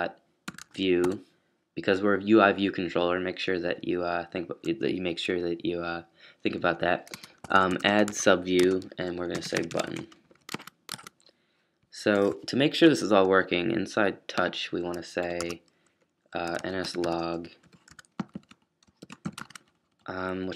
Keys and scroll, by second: 0.0-1.5 typing, 7.1-12.9 typing, 15.2-20.5 typing, 15.4 Tab, 20.3 Left.